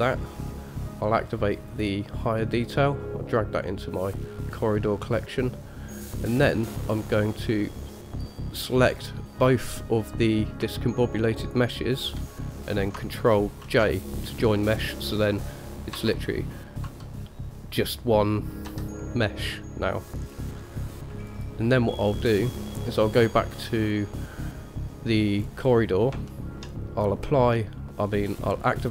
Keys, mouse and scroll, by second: 1.9 click, 2.9 click, 6.3 click, 8.3 click, 9.1 scroll down 1, 11.6 shift+click, 13.9 ctrl+j, 16.1 j, 17.0 j, 18.9 g, 21.5 click, 22.3-22.9 scroll down 1, 22.9 scroll down 1, 24.0 click, 25.6-26.3 scroll up 1, 26.5 shift+middle drag, 28.7 click.